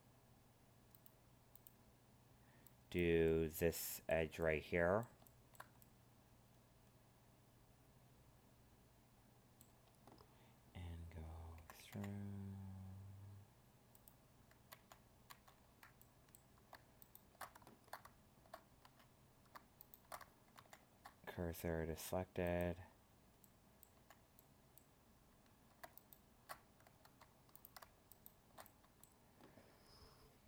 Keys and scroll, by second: 14.7 ctrl+z, 27.0 ctrl+Tab.